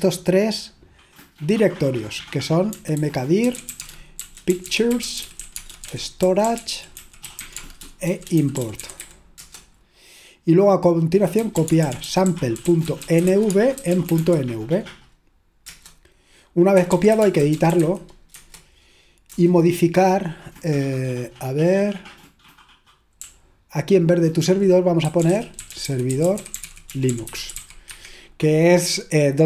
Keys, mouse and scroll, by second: 2.6-9.5 typing, 11.2-14.7 typing, 15.7 Return, 16.6-20.3 typing, 24.1-29.4 typing.